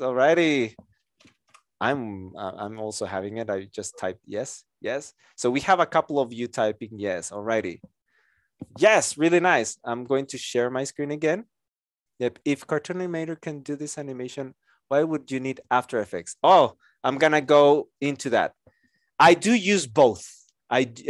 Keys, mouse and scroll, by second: 19.7 Return.